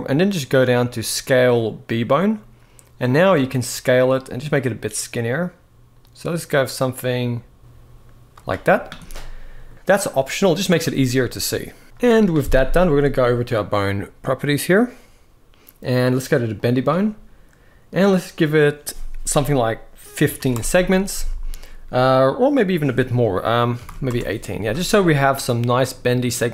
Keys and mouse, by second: 8.8 middle click, 16.3 click, 18.0-20.3 drag, 22.4-23.8 drag, 25.2 middle click.